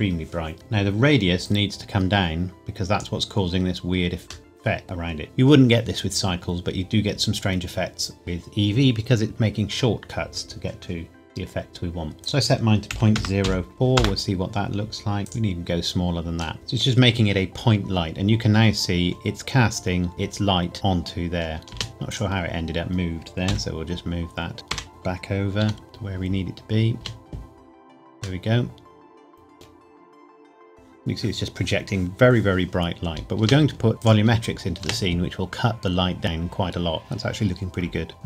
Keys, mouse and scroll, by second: 1.4 click, 4.5 middle click, 12.2 click, 12.9 KP_Decimal, 13.1 KP_0, 13.4 KP_4, 13.9 KP_Enter, 15.2 click, 16.5 middle click, 18.2-20.1 scroll down 1, 20.1 click, 22.1 click, 23.4 KP_7, 24.5 g, 24.7 Escape, 24.9 click, 25.6 g, 26.9 space, 28.4 middle click, 33.4 space, 38.1 click.